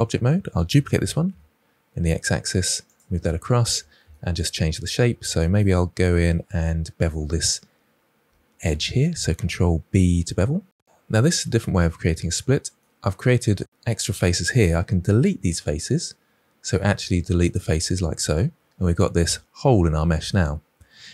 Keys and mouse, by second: 0.8 shift+d, 1.2 x, 2.8 click, 3.0-3.6 shift+middle drag, 4.9 Tab, 8.1 2, 8.5 click, 9.8 ctrl+b, 11.9 middle click, 15.0 x, 18.6-20.1 middle drag.